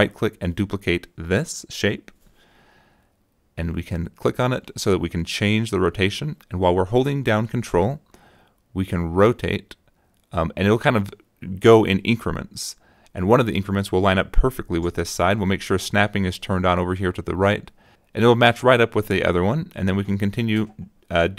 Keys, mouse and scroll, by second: 1.7 click, 4.8 click, 8.5-13.3 ctrl+drag, 17.8 click, 18.6 click, 19.2 right click, 20.5 click.